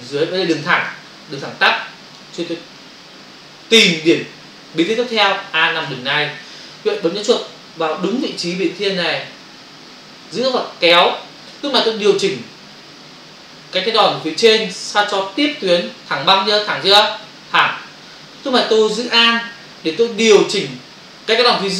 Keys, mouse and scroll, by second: 10.3 click.